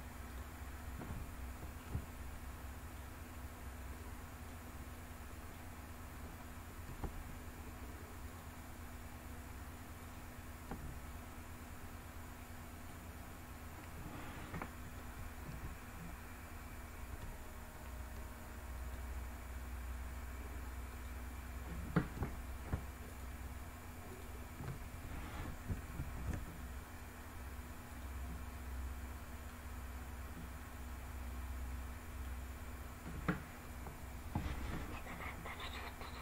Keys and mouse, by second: 1.6-2.6 middle drag, 3.5 middle click, 4.5 middle click, 10.7-12.6 middle drag, 15.3-16.7 e, 18.4 click, 22.7 shift+click, 23.7 shift+click, 25.6 e, 27.5 click, 28.0-29.2 middle drag, 31.1 middle click.